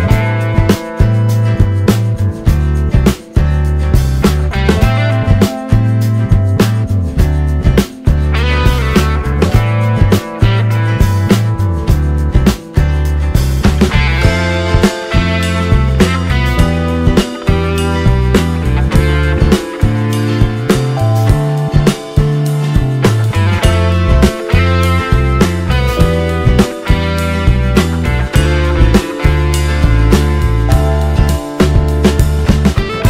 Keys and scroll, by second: 5.4 ctrl+space, 6.7 z, 7.7 z, 7.8 z, 9.7 space, 10.4 ctrl+d.